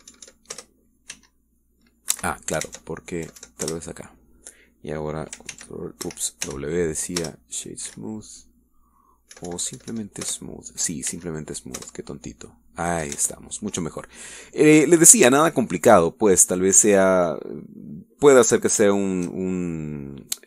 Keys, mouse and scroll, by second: 0.2 Up, 1.5 Return, 2.1 w, 3.1 Escape, 3.6 ctrl+Tab, 4.2 Up, 4.6 Return, 6.5 ctrl+w, 7.0 ctrl+Escape, 7.4 w, 8.2 Return, 8.9 w, 10.4 Up, 11.2 Return, 12.1 w, 13.0 Return, 14.2 Tab, 15.6-16.2 scroll down 4, 16.4-17.0 shift+middle drag, 17.2 shift+scroll down 2, 17.4-19.4 shift+middle drag, 19.6 scroll up 2, 20.0-20.4 shift+middle drag.